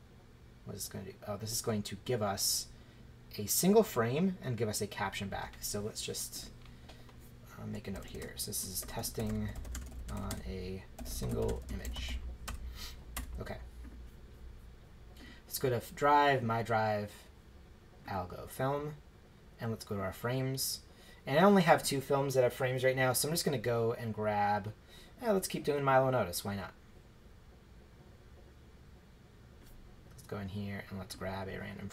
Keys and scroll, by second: 7.9-13.1 typing.